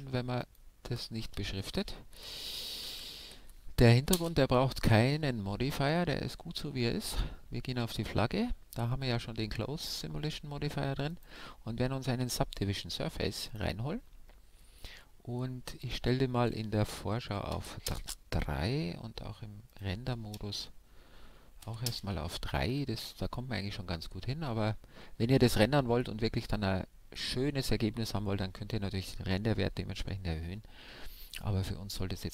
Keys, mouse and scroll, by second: 0.4-2.2 drag, 2.9 m, 5.3-7.3 middle drag, 7.0-12.9 drag, 15.9-17.7 drag, 19.7-21.4 drag.